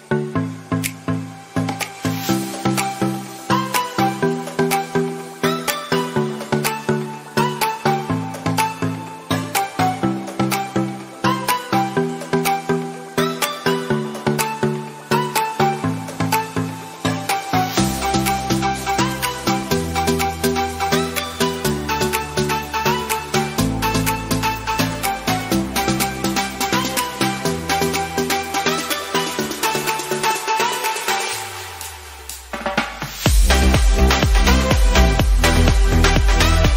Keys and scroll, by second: 12.7 ctrl++.